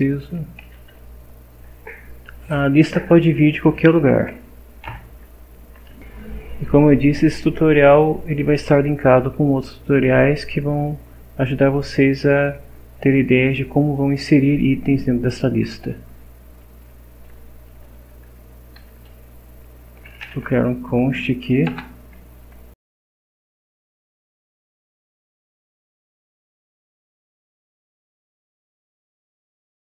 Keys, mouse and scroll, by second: 0.2 Down, 0.6 End, 0.9 Home, 5.9 shift+Up, 17.7 Return, 18.4 Down, 18.8 Up, 19.7-21.7 typing, 22.9-29.0 typing.